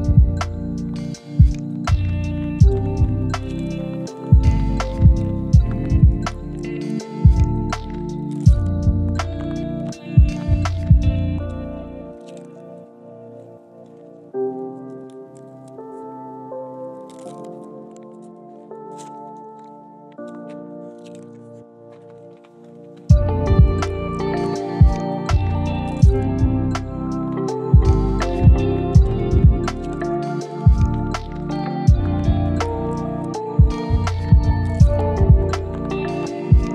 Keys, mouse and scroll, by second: 2.6 click, 2.9 scroll down 1, 3.1 scroll up 1, 3.3 right click, 4.1 click, 5.3 scroll down 1, 5.5 scroll up 1, 5.6 right click, 5.9 scroll down 1, 5.9 scroll up 1, 6.1 right click, 6.7-7.3 scroll down 2, 6.9 right click, 7.3 right click, 10.0 scroll up 1, 10.8 click, 12.9 right click, 13.2 scroll up 1, 13.4 right click, 15.2 click, 15.5 scroll down 1, 15.6 scroll up 1, 15.7 right click, 16.5 click, 17.3 right click, 17.7 scroll up 1, 17.9 right click, 18.4-19.0 scroll up 1, 19.2 right click, 19.4 scroll down 1, 19.9 right click, 20.4-20.8 scroll up 1, 20.8 right click, 21.2 scroll up 1, 21.4 right click, 21.6 scroll down 1, 21.8 scroll up 1, 22.0 right click, 22.6 scroll down 1, 22.9 scroll up 1, 23.1 right click, 24.0 scroll down 1, 24.2 scroll up 1, 24.4 right click, 24.7 scroll up 1, 25.0-25.7 scroll down 1, 25.7 right click, 26.2 scroll down 1, 26.5 scroll up 1, 26.5 right click, 27.1-27.8 scroll down 2, 27.3 right click, 27.8 right click, 28.8 right click, 29.3 scroll down 1, 29.6-30.1 scroll up 1, 30.1 scroll down 1, 30.4-31.2 scroll up 1, 31.2 right click, 31.4 right click, 32.3-33.0 scroll up 1, 33.0 right click, 33.5-33.9 scroll down 1, 33.9 right click, 34.2-34.9 scroll down 2, 34.9 right click, 35.3 scroll down 1, 35.4 scroll up 1, 35.6 right click, 35.8 scroll down 1, 36.0-36.7 scroll up 1.